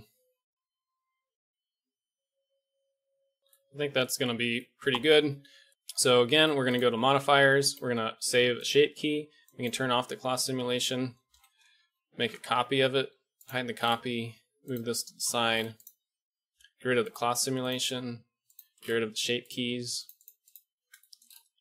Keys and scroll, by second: 0.6 Escape, 0.9 alt+a, 3.4 KP_5, 5.7 KP_1, 5.7 KP_5, 11.3 shift+Left, 12.2 shift+d, 13.1 h, 14.1 g, 15.2 alt+h.